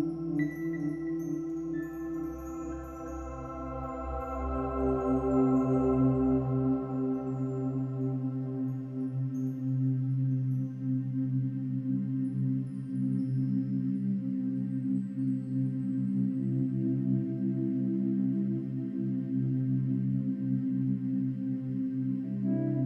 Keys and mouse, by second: 0.0 click, 2.1-5.3 drag, 6.4-7.5 drag, 8.1 click, 8.8 click, 9.1 click, 9.5-10.0 typing, 11.0 click, 11.6-12.9 drag, 13.3 click, 14.9 click, 16.6 click, 16.6 typing, 17.1 click, 18.1 typing, 18.6 Return, 19.6 F12, 20.9 click.